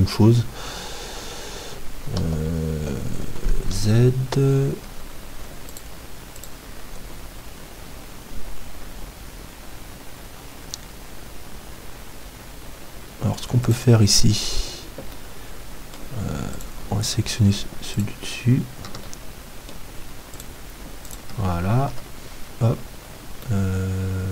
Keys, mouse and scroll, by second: 0.9-2.3 middle drag, 2.3 KP_7, 3.7 z, 4.9 Tab, 4.9-6.9 middle drag, 5.7-8.3 right drag, 13.7-19.8 right drag, 15.1-21.9 middle drag, 20.4-23.0 right drag, 21.9 KP_7, 23.0-24.3 middle drag.